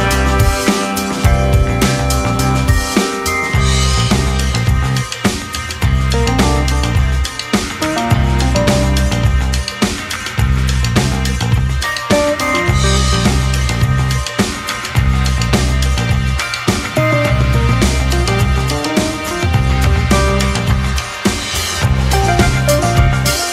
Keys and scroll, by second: 5.3 Delete, 5.8 Escape, 8.8 ctrl+[, 9.3 space, 10.1 space, 10.2 2, 12.4 2, 14.3 ctrl+c, 14.3 ctrl+shift+v, 18.6 ctrl+[, 19.3 space, 20.2 space, 20.6 space, 21.9 space, 23.3 ctrl+v.